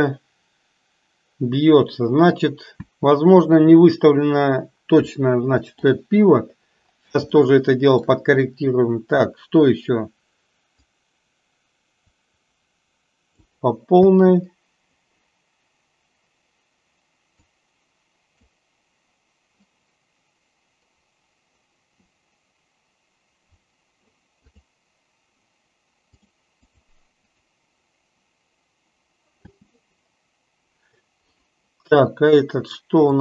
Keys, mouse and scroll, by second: 3.1 space, 5.3-6.1 shift+middle drag, 7.5-8.2 shift+middle drag, 11.1-13.4 drag, 13.9 space, 17.6-18.7 drag, 24.6 click, 26.8 click, 27.3 click, 29.6 space, 31.4 click.